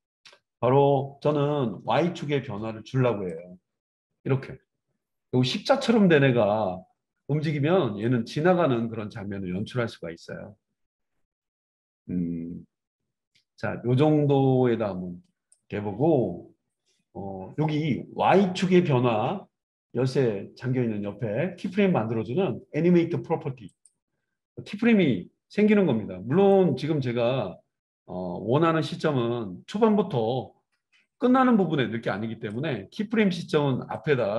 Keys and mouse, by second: 3.4-24.0 drag, 24.0-26.5 middle drag, 26.5-34.3 drag.